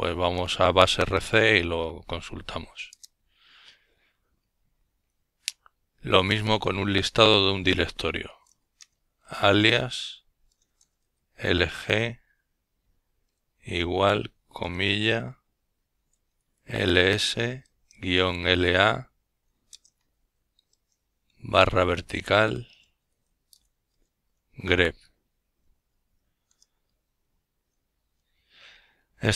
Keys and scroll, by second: 0.7-4.1 typing, 5.9 typing, 7.2 typing, 8.5-12.5 typing, 14.0 typing, 15.3-16.9 typing.